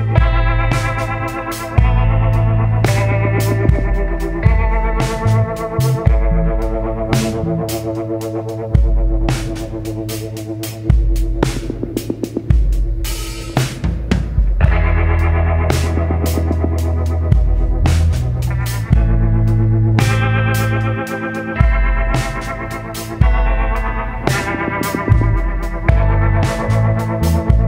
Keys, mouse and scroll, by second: 0.7 ctrl+d, 1.9 shift+click, 3.6 click, 6.3 click, 8.1 click, 9.2 click, 10.6 ctrl+d, 13.8 shift+click, 18.3 click, 20.5 click, 22.4 click, 24.0 click, 25.5 Delete, 26.6 click.